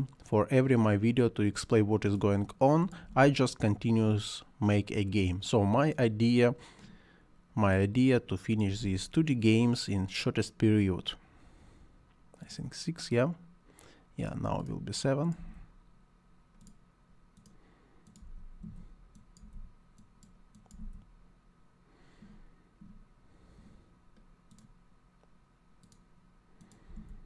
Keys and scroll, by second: 2.8-3.6 typing, 8.5-9.4 typing, 15.2-16.1 typing, 18.2 m, 18.6 o, 19.6 m, 20.8 o, 26.6-27.2 typing.